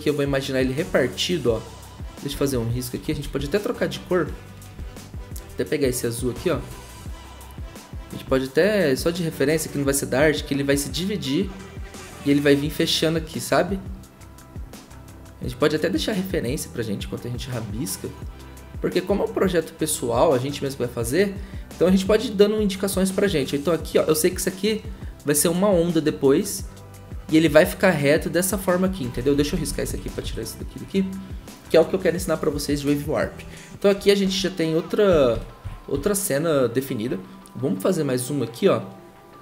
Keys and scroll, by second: 3.2 ctrl+z, 29.1 ctrl+z, 29.3 ctrl+z, 29.5 ctrl+z, 29.7 ctrl+z, 34.3-36.4 typing.